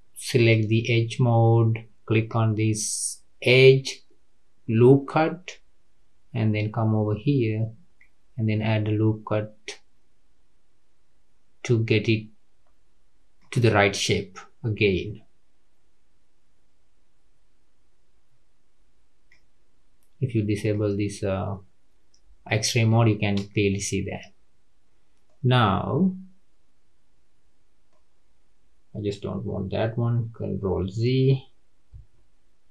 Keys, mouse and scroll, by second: 0.4 click, 2.1-17.9 drag, 20.6-23.8 drag, 25.2-28.2 middle drag, 32.2 ctrl+z.